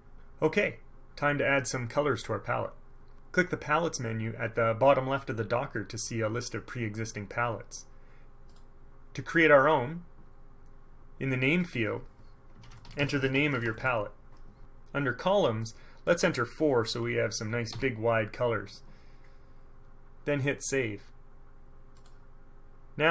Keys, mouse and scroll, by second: 8.7 click, 11.7 click, 12.5-14.3 typing, 15.8 click, 17.8 KP_4, 22.1 click.